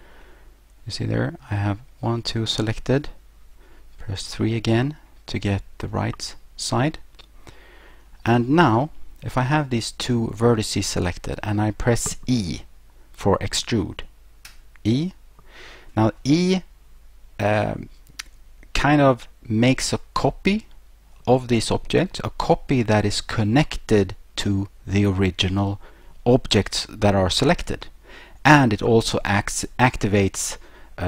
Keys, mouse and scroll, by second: 0.2 middle click, 3.4 3, 4.6-5.4 scroll up 2, 6.7 scroll up 1, 14.5 e.